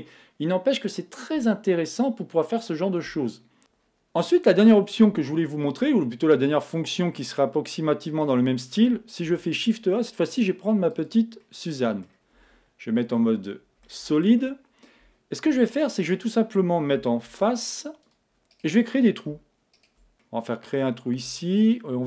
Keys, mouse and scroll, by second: 5.2-8.2 middle drag, 9.3 shift+a, 11.4-13.1 middle drag, 12.4 z, 13.3-15.4 middle drag, 15.4 Tab, 16.3-17.9 right drag, 17.3 ctrl+Tab, 18.6-21.8 right drag, 20.2-22.0 middle drag.